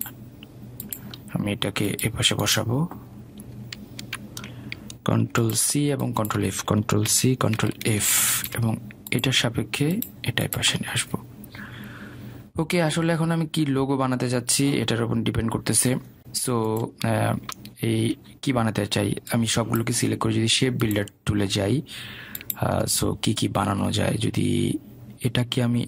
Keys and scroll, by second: 5.2 ctrl+z, 8.4 ctrl+c, 8.8 ctrl+f.